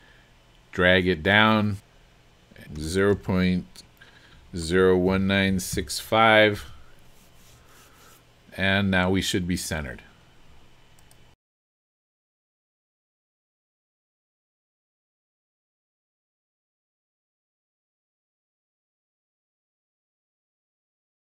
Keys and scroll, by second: 2.8 KP_0, 3.1 KP_Decimal, 4.4-5.7 typing, 6.6 Return.